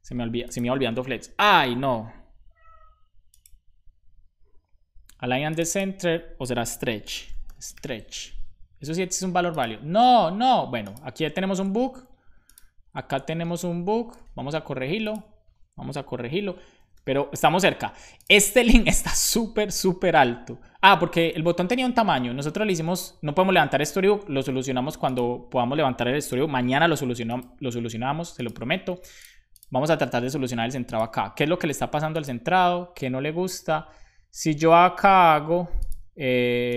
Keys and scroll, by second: 6.7-8.2 typing, 11.1 super+z, 14.1 super+s.